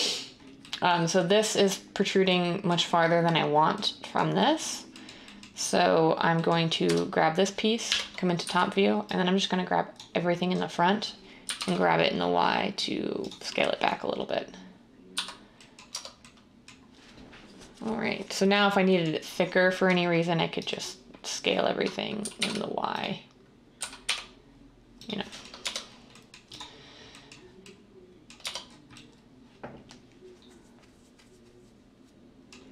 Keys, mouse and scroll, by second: 6.8 Tab, 7.8-8.3 typing, 11.1-11.9 typing, 15.1-16.4 typing, 22.1 typing, 23.7-24.5 typing, 25.5 Tab, 28.3 Tab.